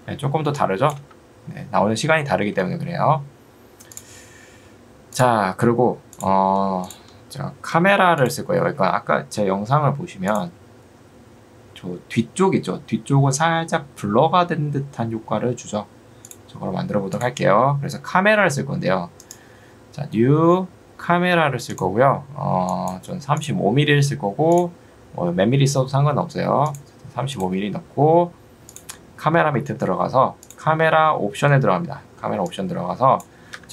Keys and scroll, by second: 7.8 u, 33.6 Escape.